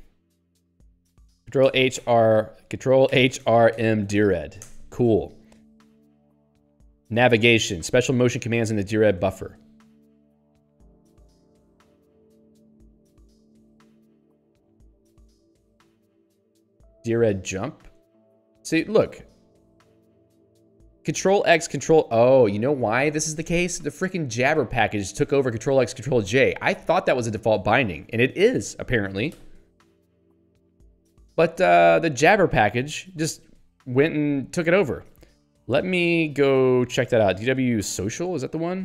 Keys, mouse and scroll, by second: 3.5-4.7 typing, 5.9 scroll down 1, 8.4 middle click, 10.0 scroll down 1, 10.6 ctrl+n, 15.8 ctrl+s, 15.9-17.1 typing, 18.0 Return, 28.1 click, 28.3 click, 30.9 ctrl+n, 31.5 ctrl+g, 35.9 ctrl+f, 37.0-38.8 typing.